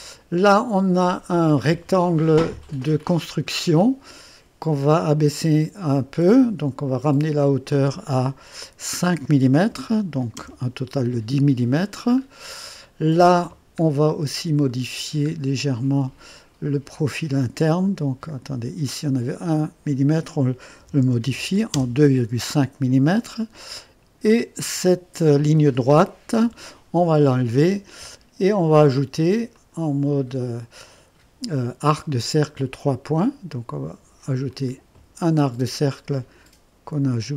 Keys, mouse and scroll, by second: 0.5-1.3 right drag, 7.2 click, 9.7-10.8 typing, 12.2-12.5 scroll up 1, 12.8-13.6 right drag, 14.0 scroll up 1, 14.7 right click, 15.4-15.8 scroll up 1, 15.8-16.6 right drag, 17.7-18.6 drag, 19.3 click, 20.8 KP_2, 21.0 KP_Decimal, 21.2 KP_5, 21.7 Return, 24.6 click, 26.4 Delete, 27.0 typing, 29.5 click, 32.4 click, 34.5 click, 34.7-35.4 typing.